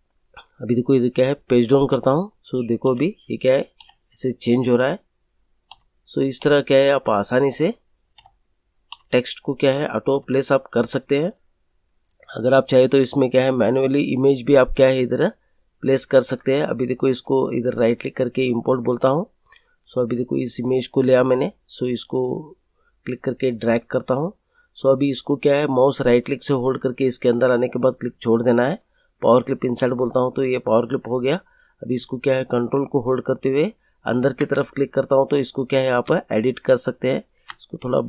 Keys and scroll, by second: 1.8 Page_Down, 4.9 Page_Down, 5.8 Page_Down, 7.5 Page_Up, 8.8 Page_Down, 10.1 Page_Down.